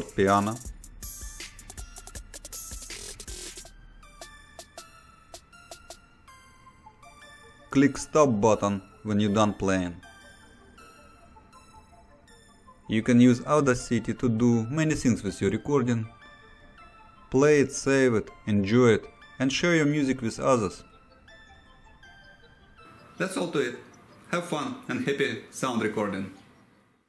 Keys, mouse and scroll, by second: 6.9 click, 9.6 click, 13.4 click.